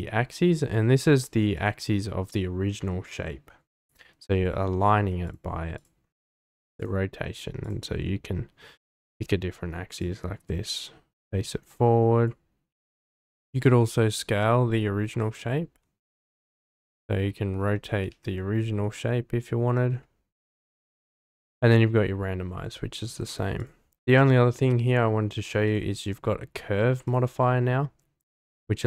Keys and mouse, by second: 10.0-12.3 drag, 13.2 Tab, 14.7 Tab, 15.3 Tab, 16.2 Tab, 17.7 Tab, 18.1 a, 20.2 Tab, 23.6 click, 25.6 click, 27.0 click, 28.2 click.